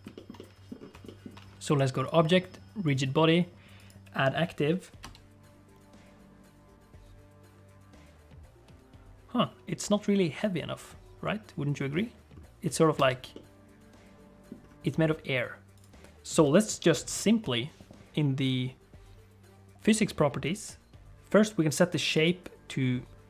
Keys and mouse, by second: 0.3 middle click, 1.0 shift+middle click, 2.1-3.9 drag, 5.0 space, 13.1 space, 13.3-14.5 middle drag, 22.2-23.2 drag.